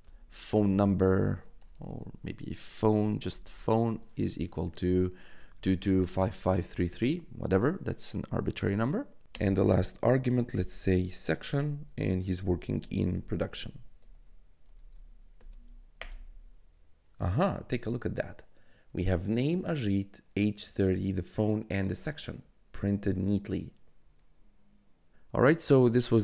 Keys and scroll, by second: 0.0-1.7 typing, 3.0 p, 3.2 h, 3.8 =, 5.3 2, 9.2-15.3 typing, 15.9 Return, 19.6 1.